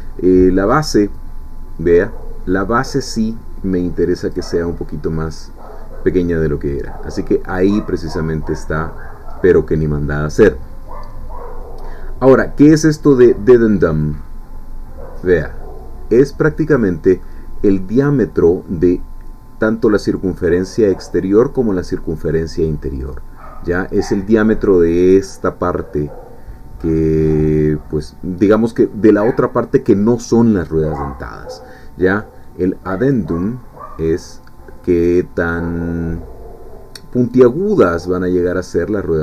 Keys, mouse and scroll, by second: 1.2-5.0 drag, 6.3-8.8 middle drag, 9.0 scroll up 2, 14.0-17.0 drag, 17.2 middle click, 18.2-19.3 scroll up 1, 22.3-24.0 middle drag, 24.0-24.4 scroll up 1, 27.3-30.2 middle drag, 30.2-33.1 scroll up 1, 33.1-39.2 drag.